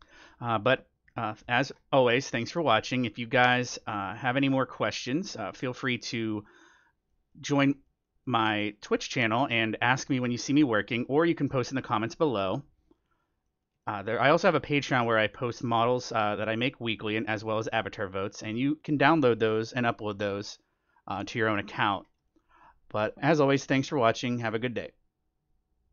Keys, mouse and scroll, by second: 0.6-1.0 scroll down 2, 1.0-10.6 middle drag, 2.4-7.0 drag, 7.1 click, 9.6-14.7 drag, 10.8-12.8 middle drag, 13.4-15.9 middle drag, 14.7-19.2 drag, 16.9-20.6 middle drag, 21.1-22.9 drag, 21.6 middle click, 22.7-24.0 middle drag.